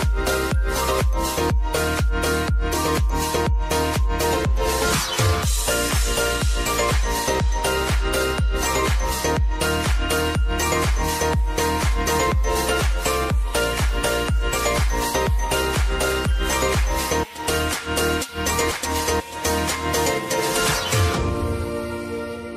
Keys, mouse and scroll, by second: 0.9 ctrl+click, 1.8 ctrl+click, 6.4 scroll down 1, 8.7 scroll down 1, 9.8 click, 9.9-11.2 drag, 14.2 scroll down 1, 14.9-16.4 drag, 16.4 scroll up 1, 17.8 space, 20.8 space, 22.0 click.